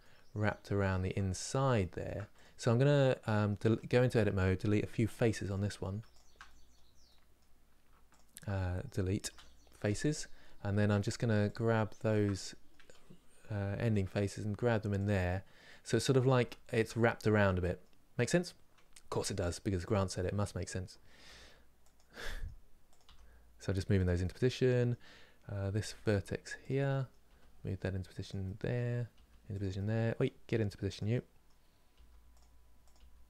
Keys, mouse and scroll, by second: 1.0 scroll up 2, 1.5 shift+middle click, 2.1 click, 3.0 middle click, 3.4 Tab, 3.6-4.9 middle drag, 4.9 3, 6.2-7.8 middle drag, 7.8 shift+click, 9.6 Delete, 9.8-11.2 middle drag, 11.2 click, 12.1-13.6 middle drag, 13.6 g, 15.1 middle click, 15.5 scroll up 2, 16.1-18.8 shift+middle drag, 18.8 2, 19.9-21.0 middle drag, 21.0 g, 21.9 middle click, 22.7 click, 22.8 g, 23.9-25.5 middle drag, 25.5 1, 26.6 middle click, 27.0 g, 28.2 middle click, 28.8 g, 29.5 middle click, 30.3 g, 30.8 middle click, 31.7 g, 32.6 click, 32.7 g.